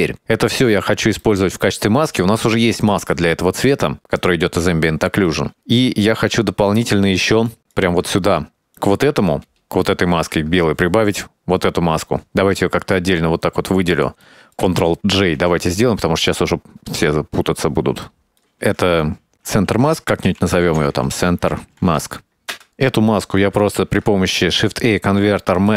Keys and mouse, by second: 1.1 middle click, 2.1-2.6 middle drag, 3.5-4.0 drag, 4.3 click, 5.3 middle click, 6.5 click, 7.2 click, 8.0 right click, 8.6 middle click, 9.2 ctrl+shift+click, 11.4 middle click, 12.3-13.1 drag, 13.6 click, 14.4 middle click, 15.3 ctrl+j, 15.9 click, 16.3 click, 16.7 middle click, 17.1 click, 17.6 click, 17.9 click, 18.4 click, 18.7-22.9 drag, 23.0 middle click, 23.2 click, 23.7 middle click, 24.0 shift+a.